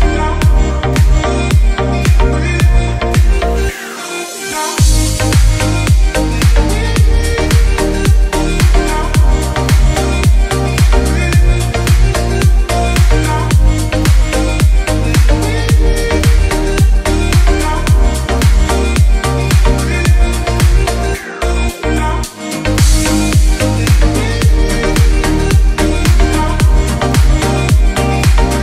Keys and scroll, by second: 1.8 space, 5.0 ctrl+r, 5.5 F3, 6.0 Escape, 8.4 ctrl+r, 9.2 g, 11.2 space, 11.8 F3, 12.3 Escape, 13.4 F3, 13.9 F2, 18.8 F8, 19.1 BackSpace, 20.6-22.0 typing, 23.1-24.9 typing, 25.4 ctrl+space.